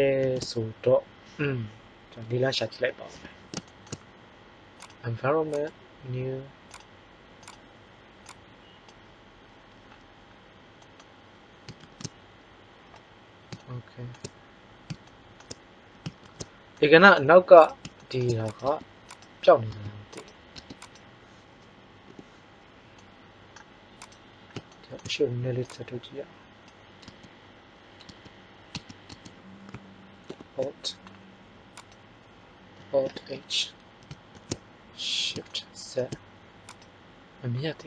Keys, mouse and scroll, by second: 0.1 shift+z, 2.1 KP_5, 3.1 KP_1, 11.7 shift+z, 16.1 shift+z, 18.6 Tab, 20.1 Tab, 20.5 Tab, 22.0 h, 24.0 click, 27.0 Tab, 28.0 Tab, 28.7 Tab, 29.0 Tab, 30.2 ctrl+h, 33.5 alt+h, 34.3 shift+z.